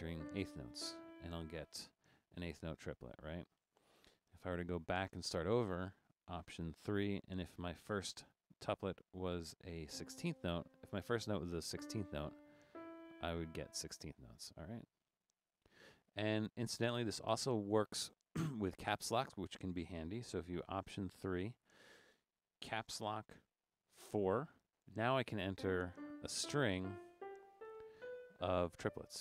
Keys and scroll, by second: 0.0-1.8 typing, 4.3-5.2 typing, 6.9 alt+3, 10.7 3, 12.2 typing, 13.4 typing, 17.5-18.5 typing, 21.3 alt+3, 24.1 shift+4.